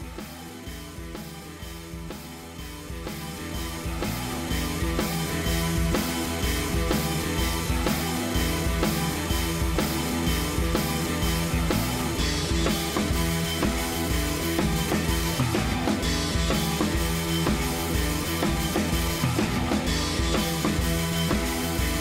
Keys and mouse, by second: 1.6 u, 10.8 click, 10.9-14.1 drag.